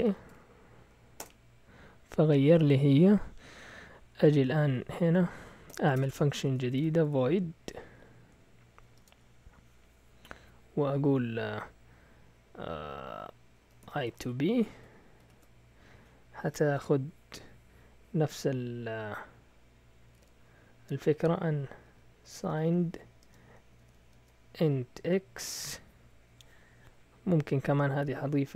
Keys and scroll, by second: 0.0-0.7 typing, 1.2 Return, 4.3 Down, 4.5 Down, 4.6 Down, 5.7-7.7 typing, 5.9 Return, 6.0 Return, 8.9 typing, 13.6-15.2 typing, 20.1 typing, 21.6-25.0 typing.